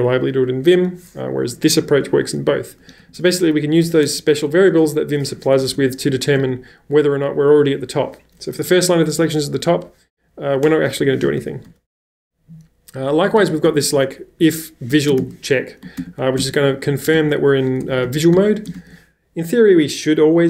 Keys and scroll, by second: 2.5-4.7 typing, 5.7 ctrl+c, 6.2 b, 6.4 b, 8.6 w, 11.0-19.2 typing.